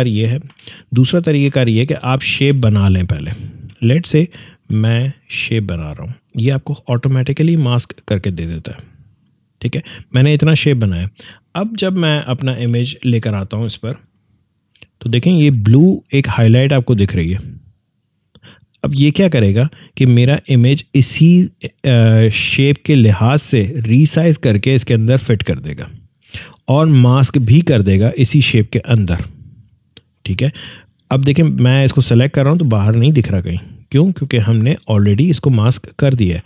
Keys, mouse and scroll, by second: 0.4 Delete, 1.5 alt+scroll up 1, 2.5 space, 2.6 click, 3.0 space, 4.7-11.3 drag, 12.5 click, 12.6 alt+Tab, 14.1-24.1 drag, 28.9 click, 34.3-34.7 alt+scroll down 1.